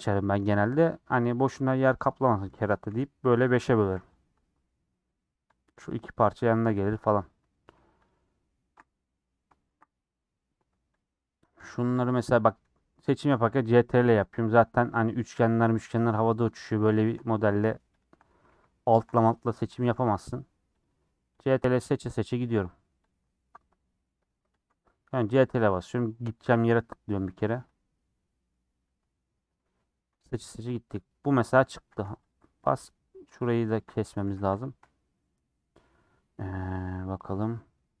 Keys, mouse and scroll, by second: 0.3 a, 0.9 click, 1.6 l, 2.8 a, 4.2 u, 5.9 click, 6.7 middle click, 7.2 scroll down 1, 7.4 middle click, 7.7 2, 7.9 click, 9.6 ctrl+Left, 10.1 middle click, 10.9 click, 12.4 ctrl+Left, 13.4 ctrl+click, 14.9-16.0 middle drag, 16.0 ctrl+click, 16.6 ctrl+z, 16.9-18.0 ctrl+drag, 18.4 ctrl+z, 18.9 ctrl+Left, 19.1 middle click, 19.9 ctrl+z, 20.8 ctrl+Left, 21.3 ctrl+Left, 23.7 middle click, 24.6 Left, 26.5 ctrl+Left, 27.4 ctrl+Left, 28.0 middle click, 28.8 scroll down 1, 28.8-31.8 middle drag, 31.8 a, 32.3 u, 32.8 middle click, 33.4 click, 34.2 a, 34.8 u, 35.2 middle click, 35.5-35.8 scroll down 4, 35.8-37.1 middle drag, 37.1-38.0 scroll down 2.